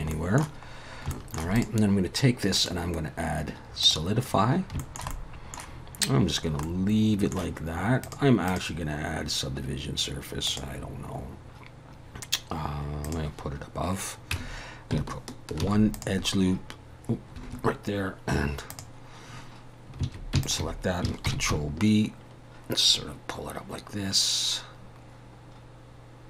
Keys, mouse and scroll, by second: 0.1 middle click, 0.8 scroll up 1, 1.1 shift+middle click, 1.6 click, 2.6 click, 4.3 scroll up 2, 4.8 shift+middle click, 5.1 middle click, 6.6 middle click, 8.0 click, 8.5 click, 13.0 click, 14.3 Tab, 15.6 ctrl+r, 18.7 click, 20.4 alt+shift+click, 21.2 ctrl+b.